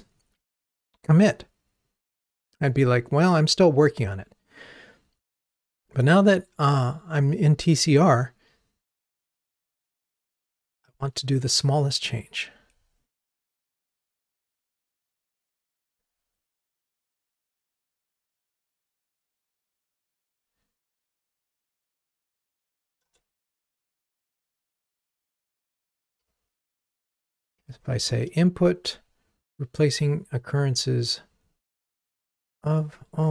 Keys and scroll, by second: 23.1 Return, 25.1 super+z.